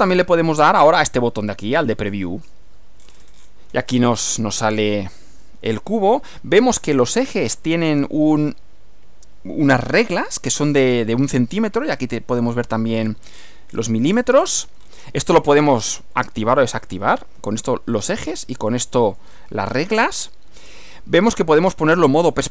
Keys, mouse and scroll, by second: 2.0 click, 3.0-3.3 scroll up 2, 3.3-3.7 scroll down 2, 3.9 scroll up 2, 4.9-7.1 drag, 7.3-8.1 drag, 10.3 click, 13.0 scroll down 2, 13.5 scroll down 2, 13.7-14.4 scroll up 4, 14.4-15.1 scroll down 4, 16.1 click, 16.9 click, 17.6 click, 18.1 click, 19.1 click, 19.8 click, 22.3 click.